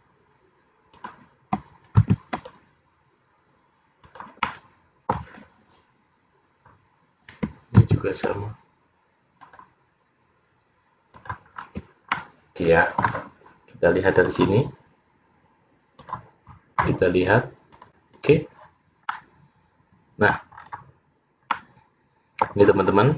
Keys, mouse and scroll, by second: 2.1 ctrl+r, 4.5 middle click, 7.9 ctrl+r, 11.7-12.3 scroll down 2, 12.3 middle click, 12.3-13.2 scroll down 2, 14.9 click, 16.6 click, 17.8 click, 19.2 middle click, 20.7-21.0 scroll up 6, 21.6 middle click.